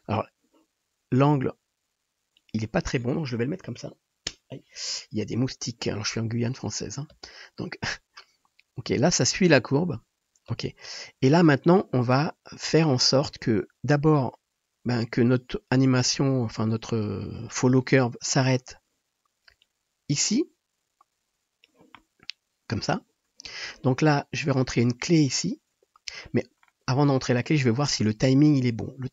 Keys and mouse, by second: 1.3 r, 2.6 click, 7.2 space, 10.6 space, 12.1 click, 12.1 middle click, 12.1 right click, 12.3 click, 12.3 middle click, 12.3 right click, 15.4 click, 15.4 middle click, 15.4 right click, 16.3-18.4 middle drag, 18.5 middle click, 20.0-29.1 middle drag.